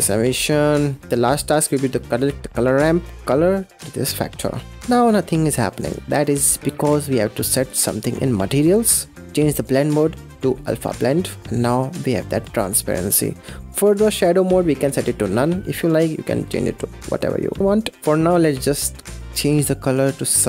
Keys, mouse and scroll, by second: 1.0 middle click, 1.7 click, 2.3-3.2 middle drag, 3.2 click, 4.8 middle click, 5.2-5.5 scroll up 5, 5.5-5.9 scroll down 4, 5.9-9.2 middle drag, 9.6-11.4 drag, 11.4-14.0 middle drag, 14.0-17.4 drag, 18.0 click.